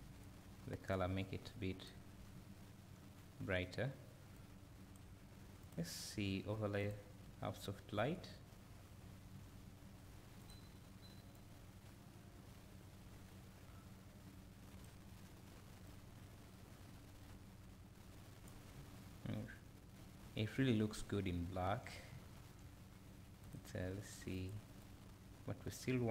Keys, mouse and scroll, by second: 2.2 scroll down 1, 2.3 `, 4.3-11.3 drag, 9.0 `, 18.8 `, 24.4 click.